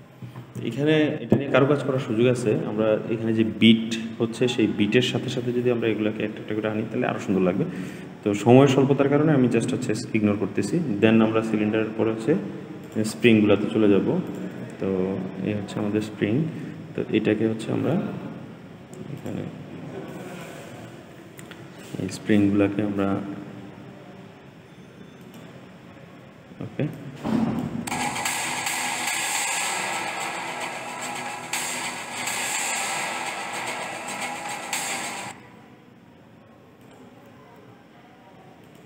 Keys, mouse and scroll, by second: 11.2-12.7 scroll up 5, 12.7 click, 14.2 shift+click, 14.7-16.4 scroll down 5, 19.0 click, 19.9 click, 20.6 g, 26.8 click, 27.7 space, 35.1 space, 36.7 click, 37.5 g.